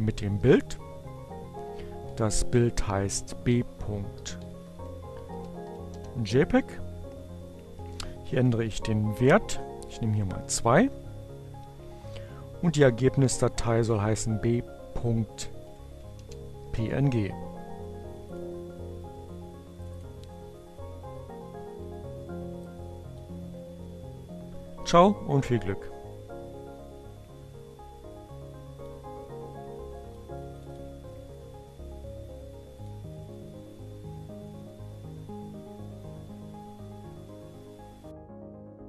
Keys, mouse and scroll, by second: 1.2 click, 2.4 click, 2.8 Up, 3.4 Left, 4.8 Right, 5.0 Delete, 6.4 b, 6.9 Right, 7.1 Left, 7.2 Delete, 8.1-9.6 typing, 11.5 Delete, 11.6 2, 13.1 Right, 14.1 Right, 14.4 Delete, 16.4-17.4 typing, 20.8 click, 21.9 click, 25.2 click, 29.4 click, 31.5 click, 32.0 click, 34.8 click.